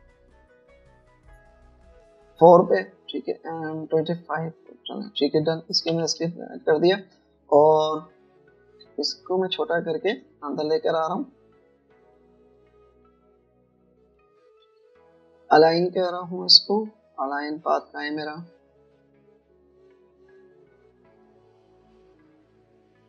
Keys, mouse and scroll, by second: 6.9 v, 10.4 alt+shift+click, 15.1 alt+click.